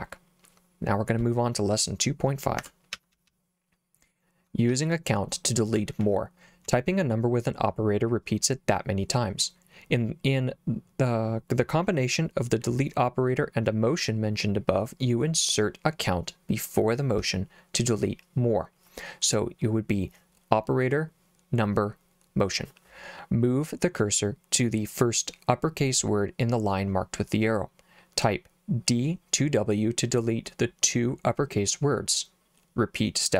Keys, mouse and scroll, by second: 2.6 Escape, 3.0 j, 3.2 j, 3.3 j, 4.7 j, 5.8 j, 6.0 j, 6.7 k.